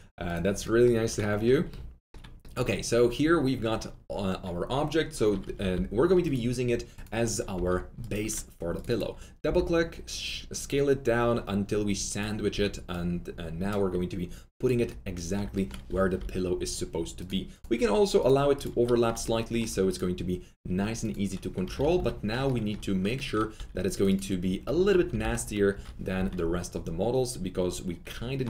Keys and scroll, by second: 7.5 4, 9.4 r, 12.5 w, 15.8 alt+F3, 16.1 alt+F4, 21.8 F3, 21.9 F4, 23.5 2, 25.1 alt+t, 25.1 z, 25.7 F3.